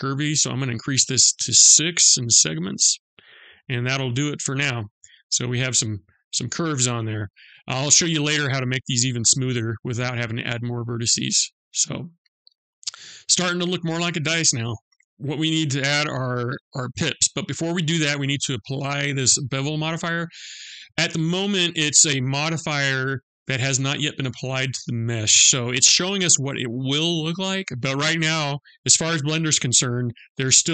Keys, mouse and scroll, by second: 0.0 click, 0.2 click, 0.9 click, 2.0 click, 3.9 scroll up 2, 4.7-5.4 scroll down 1, 5.4 middle click, 11.1 click, 12.2 middle click.